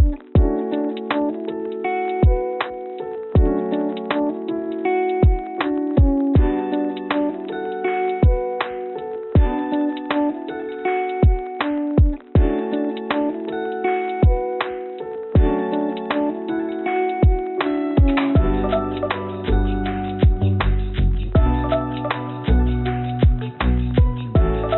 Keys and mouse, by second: 0.8 g, 2.2 click, 2.9-4.0 drag, 5.8 click, 13.5 click, 16.6 shift+s.